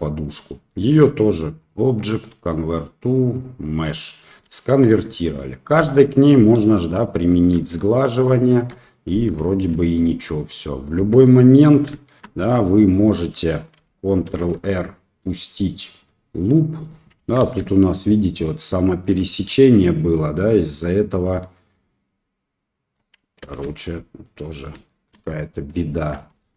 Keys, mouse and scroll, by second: 0.6 middle click, 1.6-3.4 drag, 4.1 middle drag, 4.6 shift+middle drag, 4.9-5.2 middle drag, 6.5 ctrl+3, 7.0 click, 7.4 ctrl+3, 8.2 click, 8.6 ctrl+3, 8.9-9.3 middle drag, 9.5 shift+middle drag, 10.3-10.7 middle drag, 11.1 Tab, 12.0 shift+middle click, 12.9 middle click, 13.4 click, 14.3 ctrl+r, 17.5 ctrl+z, 17.6 middle click, 18.4 middle click, 20.5 click, 21.8-23.0 drag, 23.5 ctrl+z, 24.3 middle click, 24.9 shift+click, 25.1 shift+middle click, 25.9 shift+middle click, 26.4 Tab.